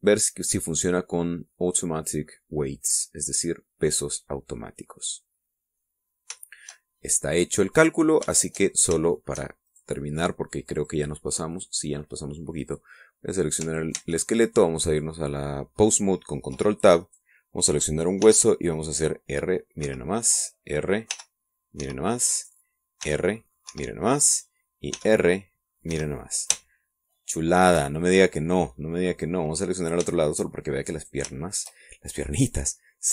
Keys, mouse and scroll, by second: 3.8 click, 5.2-5.6 scroll down 2, 5.6-7.0 middle drag, 7.1 scroll up 2, 7.5-9.0 shift+middle drag, 9.1 scroll up 3, 9.3-10.5 shift+middle drag, 10.8 shift+right click, 11.8 click, 12.6 click, 13.7 right click, 15.0 ctrl+Tab, 18.1 right click, 19.3 r, 20.9 Escape, 21.4 right click, 22.2 r, 22.9 Escape, 23.4 right click, 24.1 r, 24.7 Escape, 25.4 right click, 26.0 r, 27.0 Escape, 28.0 shift+middle click, 28.9 shift+scroll down 2, 29.3-30.9 shift+middle drag, 30.9 scroll up 1, 31.2 shift+middle click, 32.1 click, 32.5 shift+middle click.